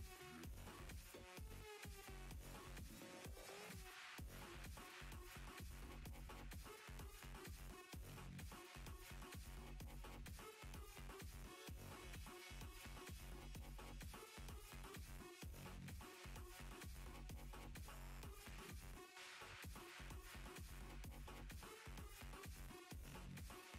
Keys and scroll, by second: 15.8 s, 16.6 s, 21.5 s.